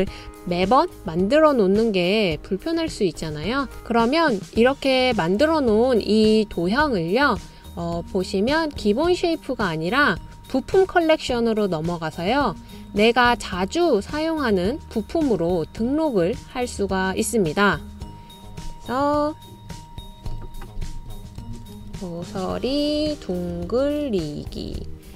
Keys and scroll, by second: 1.5 super+z, 20.5-25.1 typing.